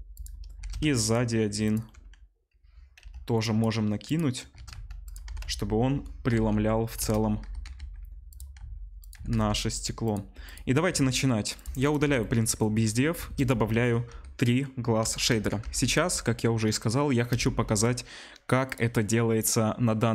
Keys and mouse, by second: 0.6 shift+d, 1.0-3.4 middle drag, 3.0 Delete, 3.4-4.1 drag, 4.1-11.5 middle drag, 4.6 shift+d, 5.3 r, 7.6 g, 8.6 s, 9.1 s, 11.5 click, 11.6 middle click, 11.8 click, 11.9-20.1 middle drag, 12.0 Delete, 13.3 shift+a.